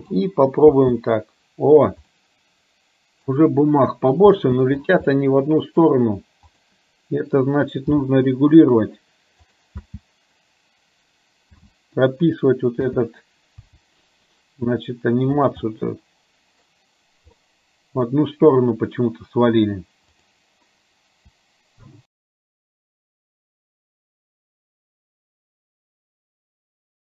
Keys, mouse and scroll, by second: 0.9 space, 2.3-3.5 middle drag, 4.5 space, 5.2 middle click, 6.5 click, 8.0 g, 9.9 space, 13.8 g, 15.7-16.8 middle drag, 17.5 middle click, 20.3 click, 22.8 middle click, 23.3 space, 23.9 middle click.